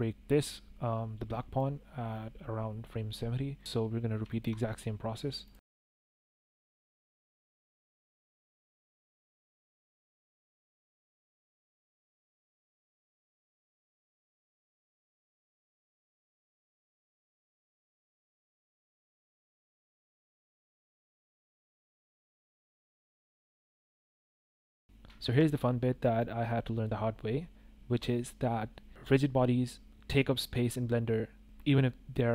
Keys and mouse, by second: 1.5-2.8 drag, 4.2 shift+drag, 4.5 click, 5.4 click, 5.7 click, 6.2 click, 6.4 click, 6.5 click, 6.8 click, 7.0 click, 7.2 click, 7.3 middle click, 7.7 click, 8.7-10.0 drag, 12.1-15.2 drag, 15.7 drag, 16.1 click, 17.0-17.3 drag, 18.0 click, 20.4 shift+click, 20.8 shift+click, 21.1-21.9 drag, 22.0 click, 22.2 click, 22.8 click, 23.3 drag, 23.5 shift+click, 24.6 click, 25.1 shift+drag, 26.0 click.